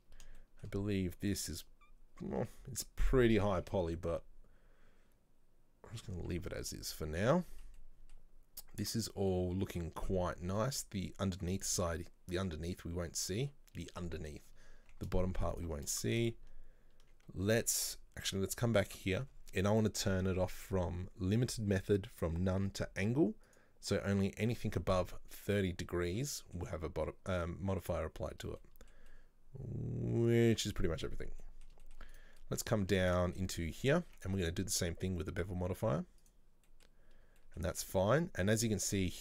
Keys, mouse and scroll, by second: 0.5-1.7 shift+middle drag, 1.7 scroll up 1, 2.2 scroll down 1, 2.5 Tab, 7.2-10.2 shift+middle drag, 10.2-10.6 scroll down 2, 10.7-11.9 middle drag, 11.9-12.8 scroll down 1, 12.8-14.5 middle drag, 14.5 scroll up 2, 14.8 Tab, 15.5 Tab, 15.6 right click, 15.8 Tab, 16.1-17.7 shift+middle drag, 17.7 Tab, 17.9 right click, 18.4 Tab, 23.5 click, 26.2 Tab, 26.3-26.8 middle drag, 26.8-27.5 scroll up 1, 27.5-31.2 middle drag, 31.2 scroll down 1, 31.5-32.2 middle drag, 32.2 right drag, 32.5-33.8 middle drag, 33.8 Tab, 34.1 Tab, 34.4-36.8 drag, 36.8-38.7 middle drag, 38.7 scroll up 1, 39.0 Tab.